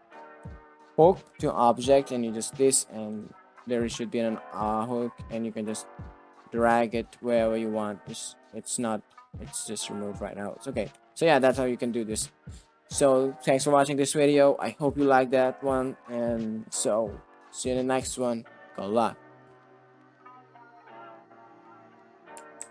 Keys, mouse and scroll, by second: 0.5 o, 3.0 Tab, 3.8 click, 4.2 click, 4.7 click, 5.6 g, 7.2-8.2 drag, 9.3 click, 10.5 middle drag, 11.0 shift+middle click, 11.2 middle drag, 22.5 alt+q.